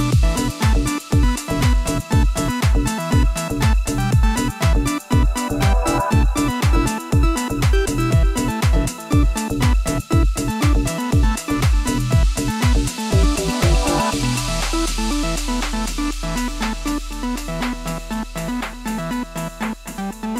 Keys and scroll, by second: 7.4 d, 9.8-11.7 typing, 15.3 d.